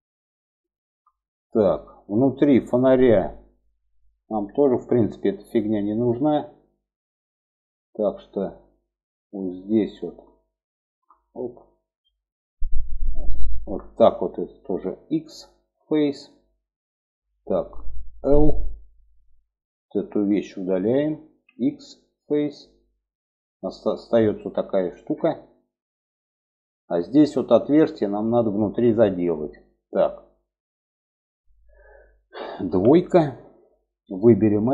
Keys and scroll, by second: 14.4 x, 17.4 l, 20.7 x, 32.0 2.